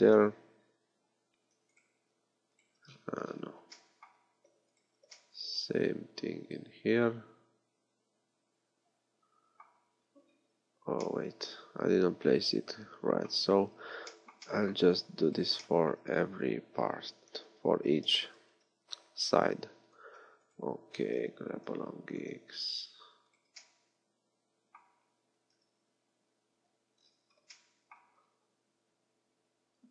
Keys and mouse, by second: 1.7-3.3 drag, 16.9-18.1 middle drag, 18.1 g, 20.5 click, 21.3 g, 22.2-23.3 drag, 23.7-25.3 drag, 25.5 KP_1.